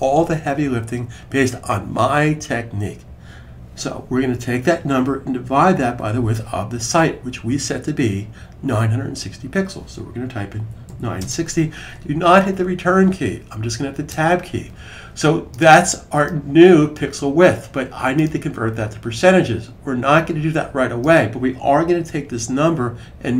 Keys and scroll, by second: 5.7 /, 8.2 typing, 10.1-11.4 typing, 21.9 Right, 22.4 Right, 22.5 Right, 22.6 Right, 22.6 Right, 22.7 Right, 22.8 Right.